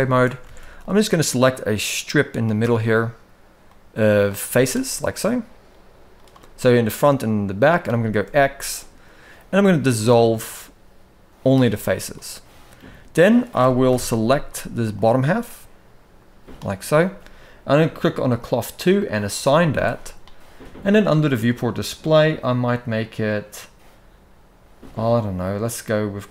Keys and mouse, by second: 0.2 alt+a, 0.7-2.1 drag, 3.4 middle click, 4.2 z, 5.9 click, 6.3-7.5 middle drag, 8.0 x, 11.8 middle click, 13.6 KP_1, 13.9 z, 15.3-16.3 drag, 18.7 click, 19.3 z, 21.2 click.